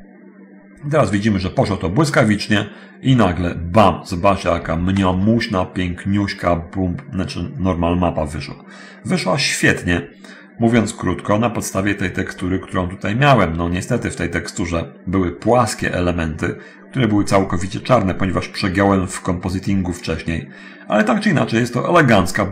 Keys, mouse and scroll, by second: 6.6 scroll up 1, 7.3-10.5 scroll down 1, 10.5-11.9 drag, 12.5 click, 14.1-15.7 drag, 16.1 scroll up 1, 22.1-22.5 scroll down 1.